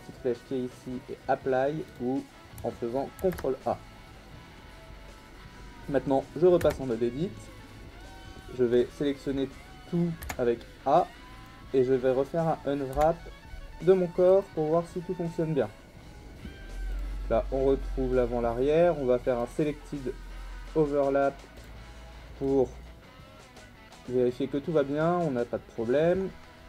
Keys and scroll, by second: 3.2 ctrl+a, 6.6 Tab, 10.2 a, 12.9 u.